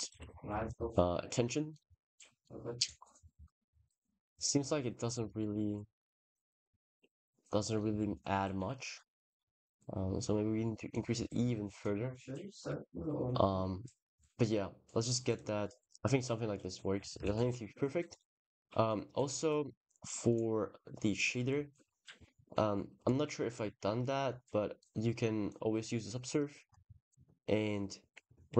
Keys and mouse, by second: 0.3 g, 0.5 z, 1.6 click, 2.2 click, 4.1 click, 4.5 click, 6.8 s, 7.2 click, 7.5 middle drag, 8.6 middle drag, 9.5 KP_0, 10.7 click, 15.1 click, 17.1 ctrl+s, 17.9 click, 20.1-21.1 drag, 23.4 click, 24.6 click.